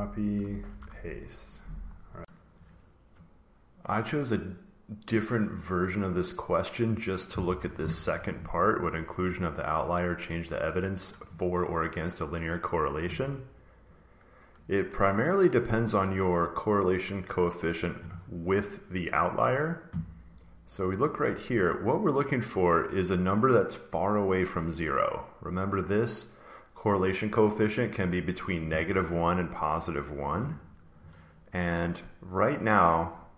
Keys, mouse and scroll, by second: 0.1 click, 0.6 ctrl+v, 1.3 click, 1.8 scroll down 1, 1.8 scroll, 2.6 click, 10.5 click, 13.8 click, 14.6 click, 17.6 click, 22.3 click, 22.8 click, 29.8 click, 30.6 click, 32.4 click, 33.1 click.